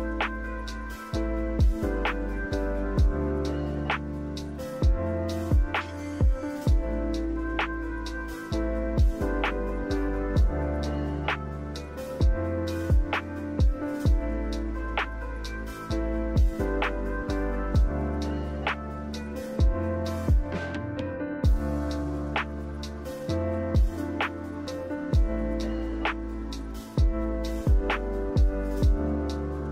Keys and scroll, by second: 10.5 5, 10.7 Return, 21.2 1.